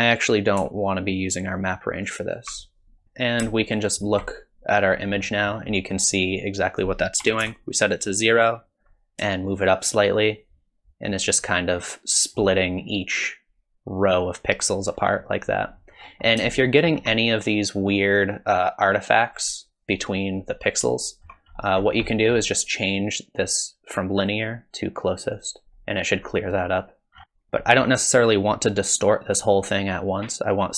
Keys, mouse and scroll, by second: 1.4 alt+click, 3.0 click, 3.0 middle click, 3.9 ctrl+shift+click, 5.2 middle click, 5.8 middle click, 6.7 click, 9.7 shift+click, 15.9-16.6 scroll up 7, 16.6 shift+middle click, 20.9 shift+middle click, 21.5-24.0 scroll up 8, 22.1 middle click, 24.2 click, 27.2-30.7 scroll down 2.